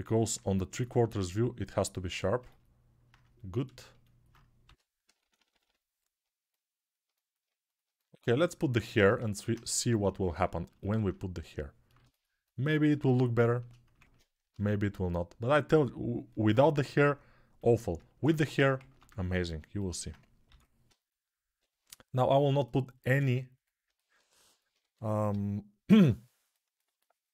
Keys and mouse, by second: 4.4-5.4 typing, 13.8 ctrl+Tab, 14.3 shift+a, 17.9 ctrl+Tab, 18.7 ctrl+Tab, 19.1-24.6 ctrl+alt+drag, 20.2 g, 20.6-21.3 ], 24.6 1, 25.0-25.8 [.